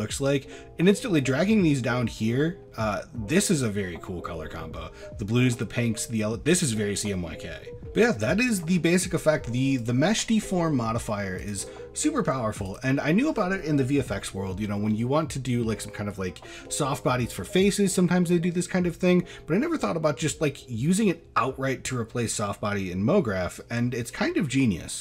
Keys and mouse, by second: 7.8 middle click, 8.4 shift+middle drag, 9.8 click, 11.4 click, 12.7 click.